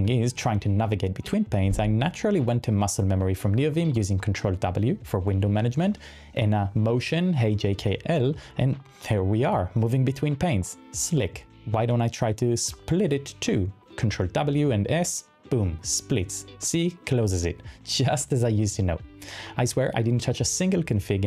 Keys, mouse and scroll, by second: 2.4-12.7 typing, 5.8 ctrl+w, 10.7 ctrl+w, 12.4 ctrl+w, 14.1-20.6 typing, 17.8 ctrl+w.